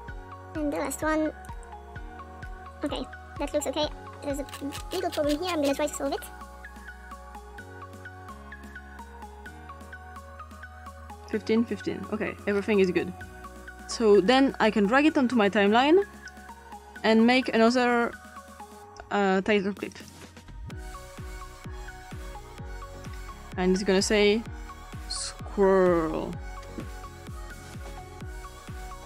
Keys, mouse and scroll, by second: 1.8 typing, 2.8 typing, 4.6-5.8 scroll up 2, 5.9 click, 6.3 click, 6.6 click, 7.7 click, 8.2-9.4 drag, 9.6 click, 11.2 click, 14.3-16.3 drag, 18.8 click, 19.9 click, 20.2 ctrl+click, 20.6 ctrl+t, 22.9 click, 25.0-26.2 typing, 27.4-29.0 drag.